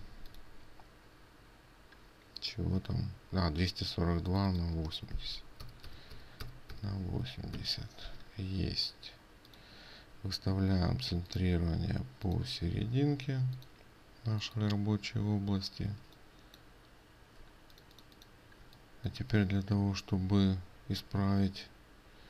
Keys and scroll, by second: 16.5 ctrl+space.